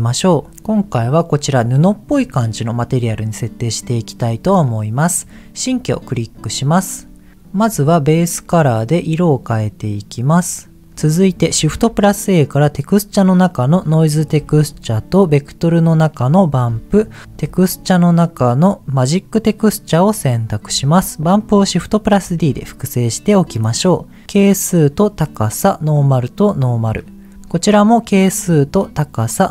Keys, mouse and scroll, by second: 0.5 middle click, 0.8 click, 3.0-4.1 scroll down 2, 5.1 click, 5.6-6.1 scroll down 2, 6.1 middle click, 6.4-6.7 scroll down 1, 7.5 click, 11.2 click, 11.6 shift+a, 14.4 shift+a, 16.7 middle click, 17.2 shift+a, 21.2 click, 22.2 shift+d, 23.3 click, 24.3-25.4 drag, 25.9-27.0 drag, 27.3 ctrl+z, 28.0-29.2 drag.